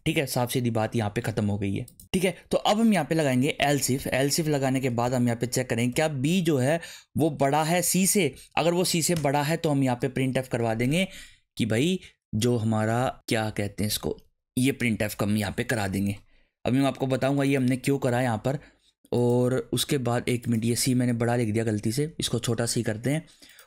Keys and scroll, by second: 3.3-5.9 typing, 7.2 shift+., 7.8 shift+c, 8.3 Right, 8.9 shift+[, 9.1 Return, 10.9 Up, 13.1 alt+shift+Down, 13.9 alt+Up, 14.2 Down, 14.8 BackSpace, 18.1 BackSpace, 21.7 Delete, 22.0 c.